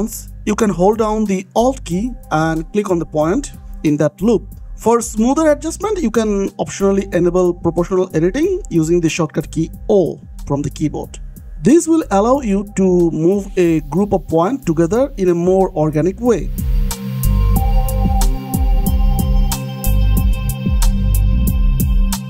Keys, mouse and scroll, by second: 0.3 click, 0.4 g, 0.7 click, 1.2 g, 1.4 click, 1.8 g, 2.0 click, 2.1 scroll down 1, 2.3-2.6 scroll up 1, 2.6 click, 2.7 g, 2.9 click, 3.1 scroll down 1, 3.5 scroll up 1, 4.3 click, 4.6 g, 5.2 click, 5.7 g, 6.1 click, 6.3 scroll down 1, 6.5 scroll up 1, 7.3 click, 7.4 g, 7.8 click, 8.9 click, 9.1-10.1 scroll up 1, 10.7 scroll up 1, 11.2-12.1 scroll up 1, 12.1-13.1 scroll down 1, 13.2 click, 14.0 g, 14.7 click, 15.1 g, 15.7 click, 16.1 g, 16.4 click, 16.6 scroll down 1, 16.7-17.0 scroll up 1, 17.0 click, 17.3-20.2 typing, 17.8 click, 18.4 click, 19.0 click, 19.6 click, 19.9 scroll up 1, 20.4 click, 20.6 shift+middle click, 21.0-21.3 scroll up 1, 21.5 g.